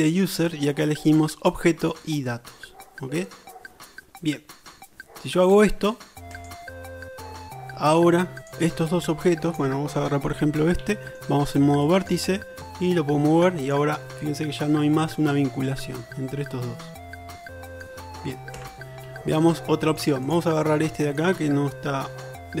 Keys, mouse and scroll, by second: 8.6-9.5 middle drag, 9.5 click, 9.7 middle click, 10.3 Tab, 10.9 shift+middle click, 12.2-13.4 middle drag, 14.0 middle click, 14.9 shift+middle click, 17.3 shift+middle click, 18.6 Tab, 19.1-19.7 shift+middle drag, 20.4-22.6 middle drag.